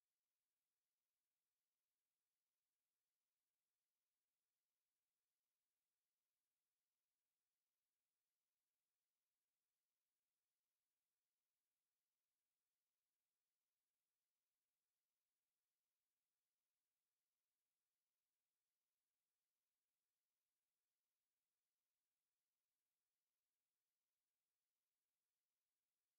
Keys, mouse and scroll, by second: 0.6-1.3 drag, 2.2 click, 2.9 KP_1, 3.9 click, 5.0 KP_1, 5.6-6.3 drag, 6.8-9.5 drag, 13.2-15.7 drag, 16.1 click, 17.6 click, 20.1 click, 21.7 click, 22.6 click, 23.4 click.